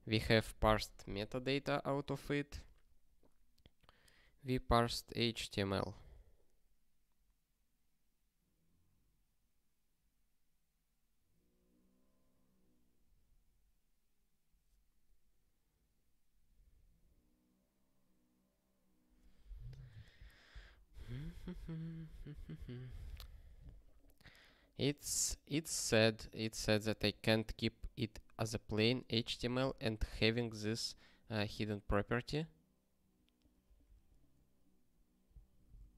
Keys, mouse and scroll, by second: 20.8 ctrl+p, 21.2 ctrl+p, 23.3 ctrl+p, 24.9 scroll up 1, 26.1-26.6 scroll up 1, 33.9 super+o, 35.5 ctrl+n, 35.7 ctrl+n.